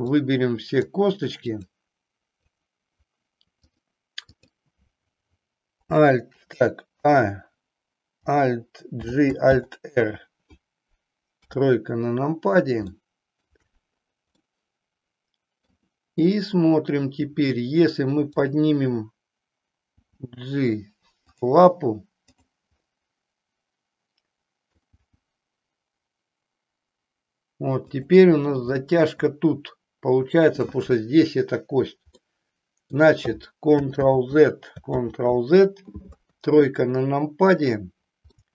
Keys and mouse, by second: 0.2 click, 1.6 click, 2.3 click, 3.8 click, 7.1 a, 8.9 alt+g, 9.4 alt+r, 11.3 KP_3, 12.9 shift+middle click, 14.6-15.7 middle drag, 18.3 click, 20.1 g, 21.4 click, 22.2 click, 22.8-24.9 middle drag, 24.9 g, 28.7 middle click, 32.1 middle click, 33.9 ctrl+z, 34.9 ctrl+z, 34.9 ctrl+click, 36.1 KP_3, 37.4 click, 38.3 shift+middle click.